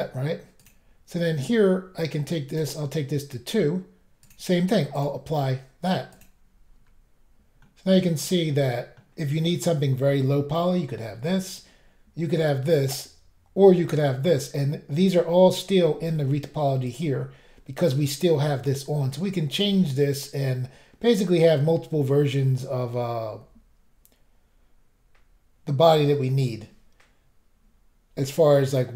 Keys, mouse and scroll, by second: 0.6 click, 0.7 click, 2.5 click, 2.6 click, 4.2 click, 4.3 click, 4.9 click, 5.0 click, 6.1 click, 6.2 click, 6.8 scroll down 1, 7.6 middle click, 16.9 click, 16.9 click.